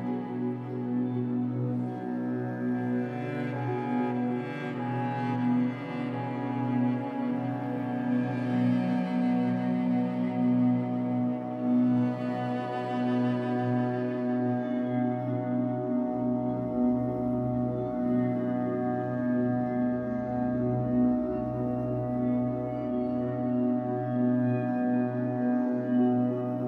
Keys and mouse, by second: 0.0 1, 0.3 Return, 1.5 click, 1.7 click, 2.0 click, 2.4 click, 3.2 BackSpace, 3.3 1, 3.4 Return, 5.1-6.3 alt+drag, 8.1-15.3 drag, 13.4 space, 15.6 space, 16.6-17.7 drag, 16.6 space, 18.0-18.9 drag, 20.1 click, 21.2-21.5 drag, 22.4 click, 23.3-24.8 drag, 26.3 click.